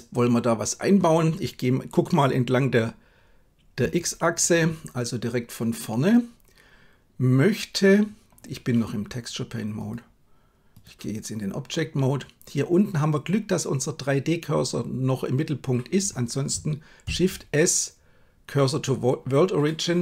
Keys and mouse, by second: 3.8 KP_3, 9.9-10.8 drag, 17.1 shift+s.